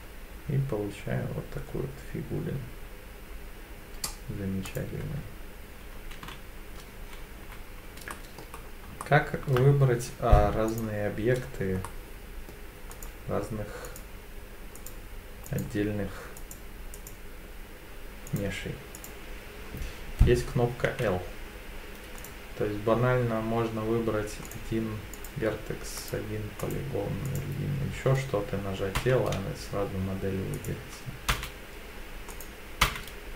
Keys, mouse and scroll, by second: 4.7 click, 5.0 Tab, 6.2 z, 8.1 middle click, 8.6 scroll down 2, 9.0 shift+middle click, 10.7 click, 11.4-11.9 scroll down 3, 11.9 middle click, 12.9 click, 13.9 click, 14.8 click, 15.5 click, 16.4 click, 16.9 click, 18.3 click, 19.0 click, 20.9 l, 22.2 click, 24.5 click, 25.1 click, 26.0 click, 26.6 click, 27.3 click, 29.0 l, 30.5 click, 31.3 l, 32.3 click, 32.8 l.